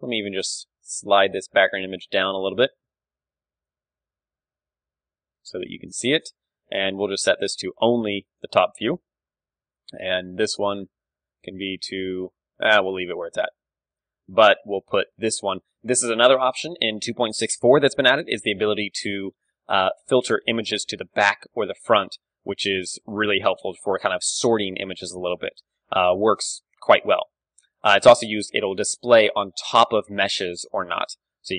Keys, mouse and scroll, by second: 0.0 n, 0.5-3.9 middle drag, 1.4 a, 3.9-5.9 drag, 7.0-9.3 drag, 9.3-11.6 middle drag, 11.6-13.6 drag, 13.6-15.4 middle drag, 19.8-25.2 drag, 25.2 middle click, 26.5-28.8 drag, 28.8 KP_1, 29.1 middle click, 29.9 KP_3.